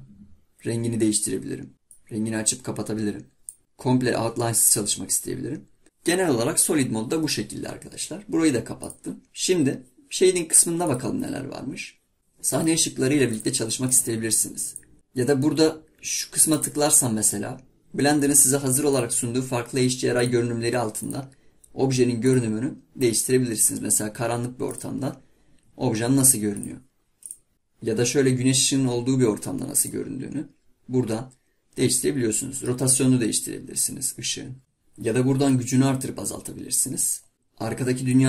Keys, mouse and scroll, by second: 11.1 drag, 26.6 click, 34.6-35.8 drag.